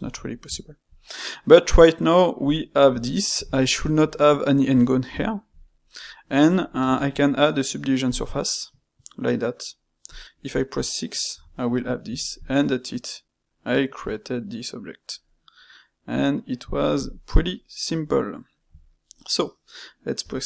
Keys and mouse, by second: 2.4 click, 2.9-6.7 ctrl+middle drag, 6.7 space, 11.7-15.4 middle drag, 16.7-20.4 ctrl+middle drag.